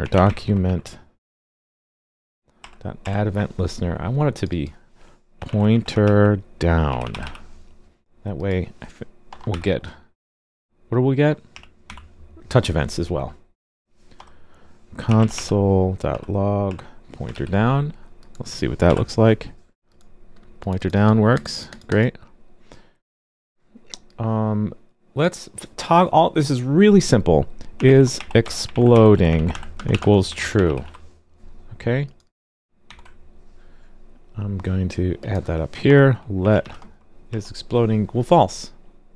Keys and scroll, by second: 17.3 super+s, 18.8 alt+super+j, 32.8 super+c.